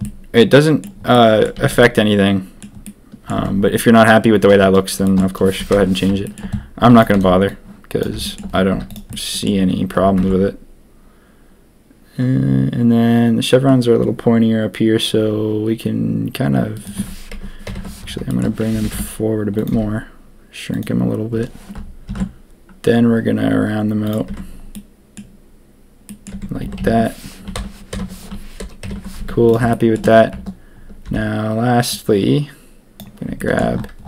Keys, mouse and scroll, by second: 0.0 click, 1.1 click, 1.5 a, 1.7 a, 1.8-2.5 drag, 2.8-3.2 drag, 3.3 Tab, 5.0 shift+click, 5.7 ctrl+KP_3, 6.2 shift+middle click, 6.8 z, 7.1 b, 8.2 shift+middle click, 8.7 z, 9.1 click, 10.1 ctrl+b, 17.6 ctrl+KP_3, 18.2 shift+middle click, 18.7 g, 19.7 s, 22.0 ctrl+b, 24.2 Tab, 24.7 click, 26.0 click, 26.3 Tab, 26.6 a, 26.7 a, 27.9 ctrl+KP_Enter, 28.8 ctrl+KP_3, 29.1 z, 29.7 shift+middle click, 31.0 b, 33.3 middle click.